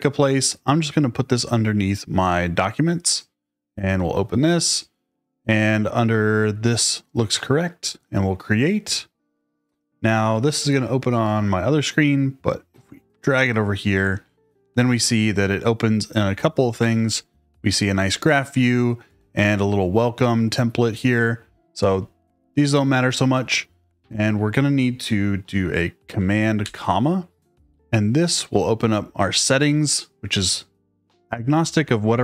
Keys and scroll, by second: 26.6 super+,.